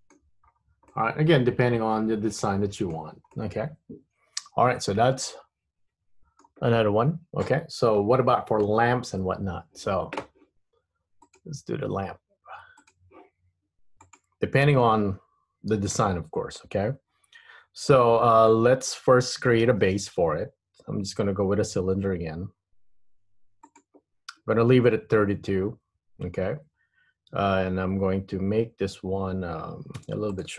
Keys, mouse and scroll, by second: 0.8-1.1 scroll down 3, 1.1 middle click, 3.6 middle click, 11.4 click.